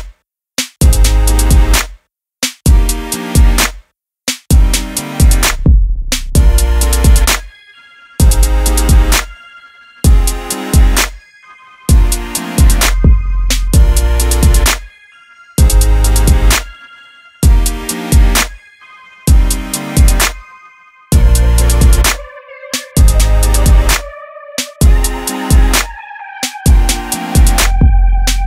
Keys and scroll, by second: 0.2 [, 0.2 [, 24.9 Return.